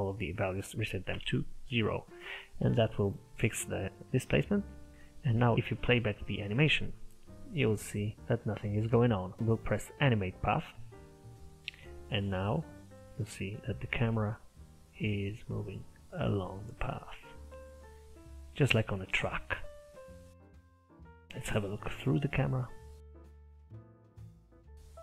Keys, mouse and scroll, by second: 1.9 middle click, 2.7-3.0 scroll up 2, 3.0 click, 3.2-7.0 middle drag, 7.0 click, 9.4 click, 11.7 click, 21.5 KP_0, 23.4-25.0 scroll up 3.